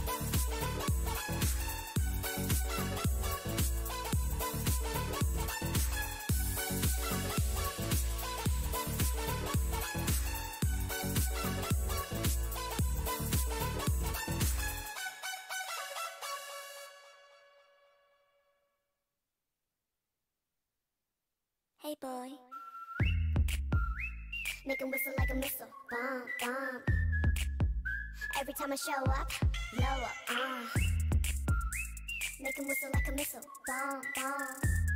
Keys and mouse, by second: 1.6 c, 7.8 a, 8.0 a, 8.5 u, 9.8 n, 10.5 n, 10.8-11.8 drag, 14.2 l, 14.6 h, 16.9 a, 19.0 ctrl+Tab, 19.2 a, 19.6 ctrl+Tab, 20.4 ctrl+Tab, 20.7 KP_3, 22.3 z, 23.2-24.3 drag, 24.2 z, 27.3 c, 28.9 z, 29.1 c, 29.9 z, 30.7 z, 31.2 click, 32.0 ctrl+e, 32.5 a, 32.7 a, 33.0 u.